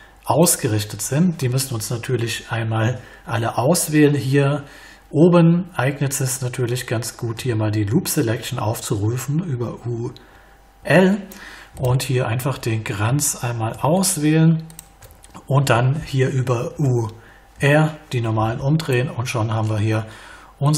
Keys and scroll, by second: 7.3 u, 10.8 l, 16.7 u.